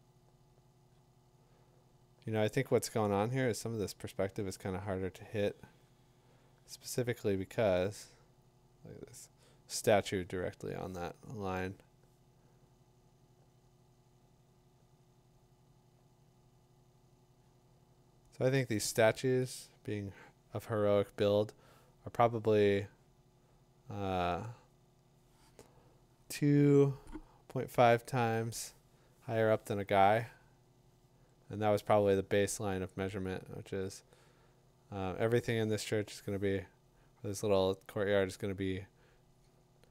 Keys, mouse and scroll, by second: 33.0-39.9 drag.